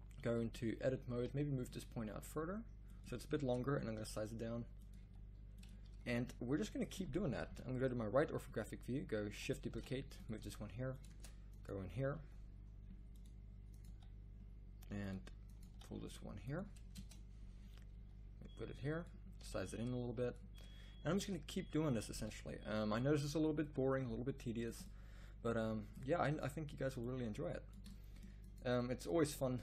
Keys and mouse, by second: 0.4 z, 1.1 g, 3.4 Tab, 3.9 s, 5.0 g, 5.8 z, 7.5 KP_3, 9.7 shift+d, 10.4 r, 11.1 Tab, 12.2 g, 14.0 g, 15.6 g, 17.0 Tab, 17.9 g, 19.4 s, 21.1 shift+d, 22.1 r, 23.1 s, 23.9 g, 27.8 middle drag, 28.4-29.5 middle drag.